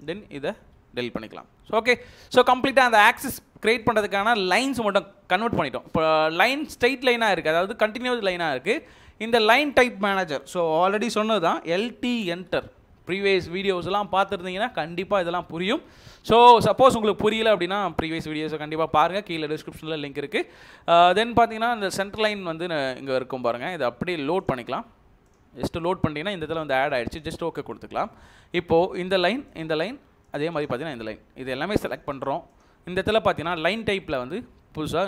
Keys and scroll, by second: 0.5 Delete, 11.5-12.1 typing.